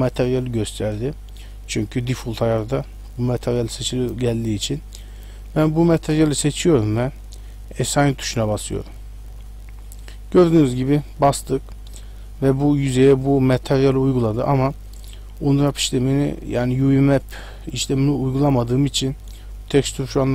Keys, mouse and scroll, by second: 5.7 click, 8.0 click, 10.4 middle click.